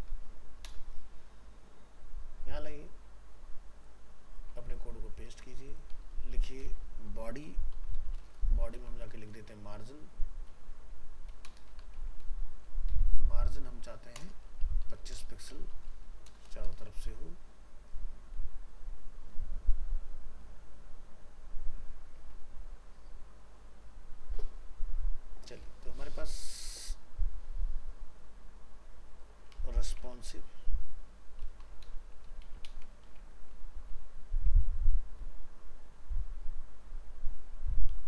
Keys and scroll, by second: 4.6 ctrl+v, 17.0 ctrl+s.